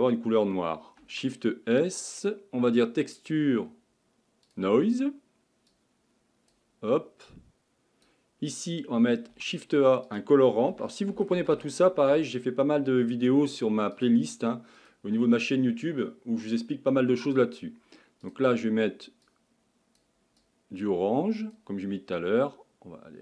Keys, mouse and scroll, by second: 5.7-14.0 drag, 19.2 click.